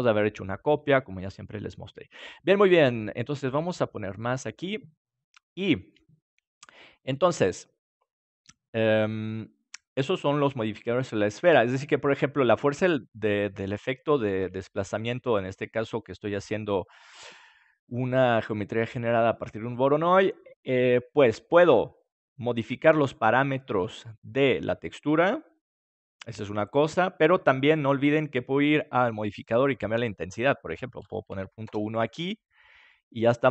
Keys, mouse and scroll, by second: 3.4-6.3 drag, 5.0-7.9 middle drag, 16.1-31.9 drag, 32.9-33.5 middle drag.